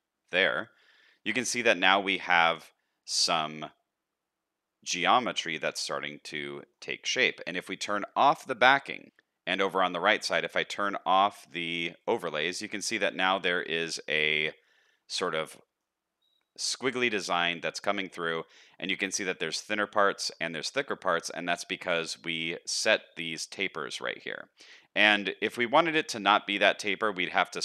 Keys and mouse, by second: 1.6 shift+middle click, 2.1-5.9 middle drag, 6.6 shift+middle click, 6.9 middle click, 12.9 middle click, 14.9 shift+middle click, 15.4 middle click, 18.9 shift+middle click, 20.1 shift+middle click, 22.2 n.